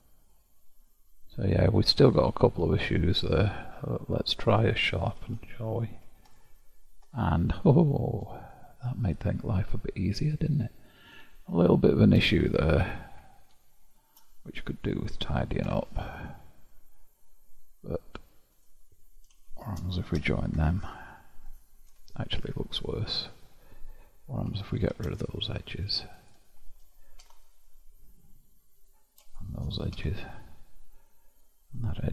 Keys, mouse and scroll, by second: 0.6-1.4 scroll up 5, 1.5-2.8 middle drag, 2.8-3.5 scroll up 5, 4.0-5.3 scroll down 4, 5.3 q, 7.6-9.0 scroll down 1, 9.0-11.8 middle drag, 11.8-12.7 scroll up 6, 12.7-14.7 shift+middle drag, 14.7-15.8 scroll up 2, 15.8 Tab, 17.0-18.6 middle drag, 18.6 click, 19.6 shift+click, 20.2 j, 20.7 Tab, 22.0 Tab, 24.5 2, 24.7 drag, 25.2 shift+drag, 25.8 shift+drag, 26.2 shift+click, 27.3 ctrl+x, 28.8 drag, 29.3 shift+click, 30.0 ctrl+x, 31.4 drag, 31.5-32.1 scroll down 1.